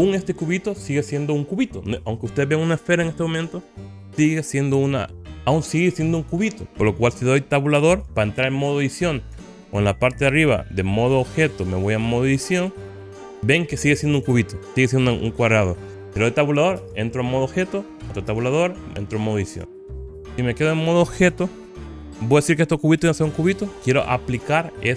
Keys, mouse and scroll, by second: 13.0 click, 16.9 Tab, 18.4 Tab, 19.7 Tab, 20.9 scroll down 1.